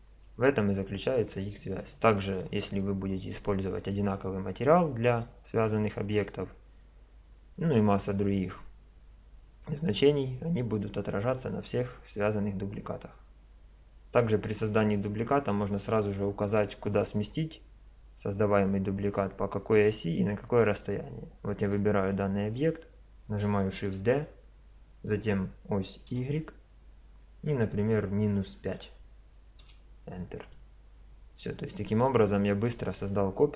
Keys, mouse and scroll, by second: 0.0-2.0 middle drag, 2.6-21.6 middle drag, 21.6-23.6 drag, 24.0 shift+d, 30.5-33.5 middle drag.